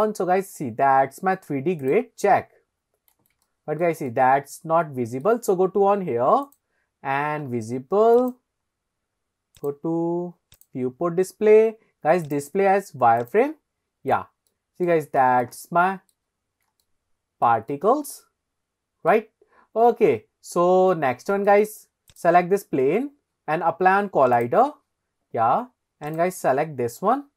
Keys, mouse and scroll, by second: 1.8 click, 2.7 scroll up 2, 3.4 shift+middle click, 4.1-5.2 middle drag, 8.1 click, 8.7-9.1 scroll down 3, 9.6 click, 10.6 click, 11.0-11.9 scroll down 2, 12.2-13.3 drag, 13.8 scroll up 2, 14.5-15.0 middle drag, 15.2-15.5 shift+middle drag, 15.6-16.2 middle drag, 16.4 scroll up 2, 16.8-17.5 shift+middle drag, 17.7-19.1 middle drag, 19.4-20.0 scroll down 3, 20.0-20.5 scroll up 2, 20.5-20.8 scroll down 2, 20.9-21.5 shift+middle drag, 22.1 click, 24.3 click, 26.1 click.